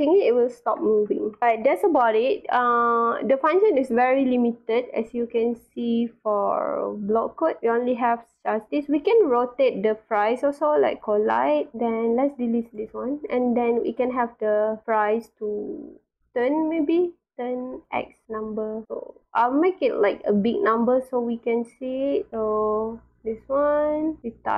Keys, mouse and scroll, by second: 0.3 w, 0.9 s, 3.6 click, 5.3 click, 6.9 scroll down 1, 7.4 scroll up 1, 10.8 click, 12.1 click, 12.6 right click, 13.1 click, 13.8 click, 16.0 click, 17.6 click, 19.1 click, 19.5 click, 20.1 click, 21.4 click, 22.3 w, 23.1-24.5 drag.